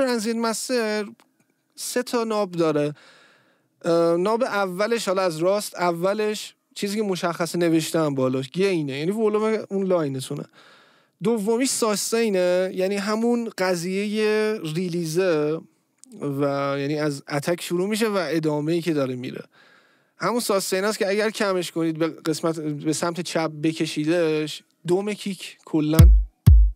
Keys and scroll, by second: 25.8 space.